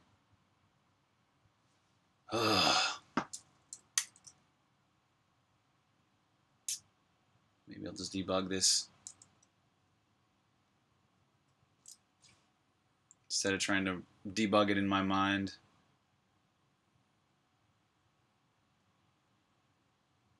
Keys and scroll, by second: 3.8 super+b, 4.1-5.3 typing.